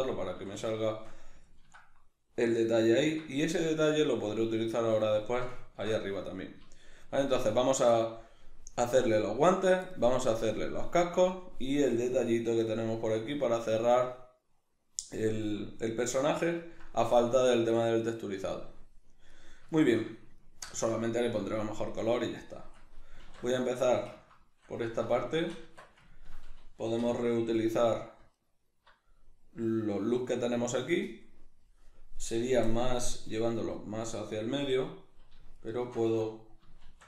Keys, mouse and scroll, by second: 0.4 a, 0.8-19.3 shift+middle drag, 19.3 right click, 19.8-27.7 shift+middle drag, 23.2 alt+q, 24.9 alt+q, 25.6 Tab, 27.0 3, 27.7 right click, 28.4 alt+right click, 35.6 alt+shift+right click, 36.9 shift+d.